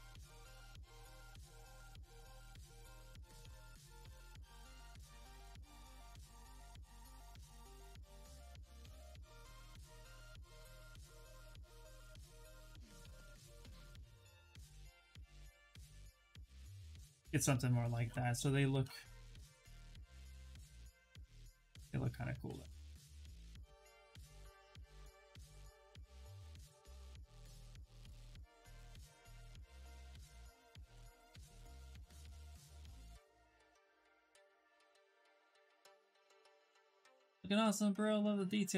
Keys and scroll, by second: 2.8 w, 25.7 w, 31.8 shift+f, 32.1 shift+f.